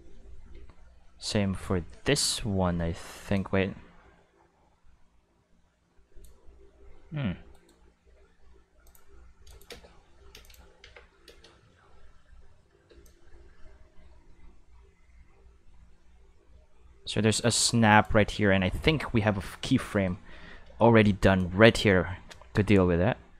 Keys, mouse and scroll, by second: 0.5 a, 3.3-6.2 drag, 7.0 r, 7.5 right click, 8.0 r, 8.9 click, 9.5 click, 9.7 space, 10.3 space, 10.4 click, 10.8 q, 11.3 space, 12.9 space, 13.0-18.0 drag, 19.0 middle click, 19.5 middle click, 19.8 middle click, 21.4-23.3 drag.